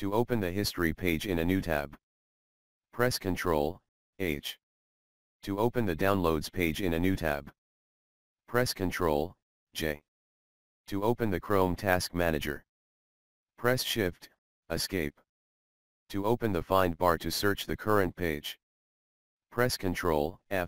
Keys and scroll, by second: 20.5 ctrl+g.